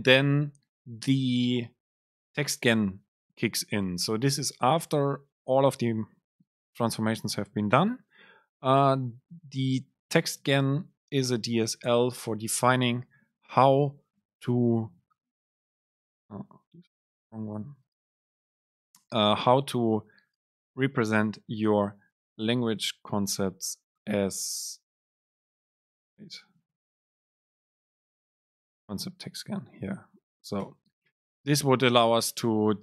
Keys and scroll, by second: 19.4 Delete, 29.8 super+space, 31.0 Down.